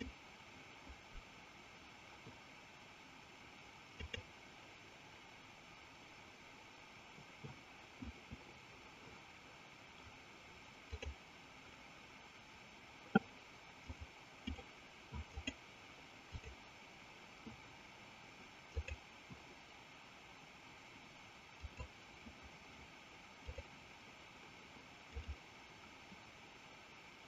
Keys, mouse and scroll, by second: 1.1 click, 5.2 click, 10.7 click, 13.8 click, 15.4-16.6 drag, 18.6-22.1 drag, 23.3-25.5 drag.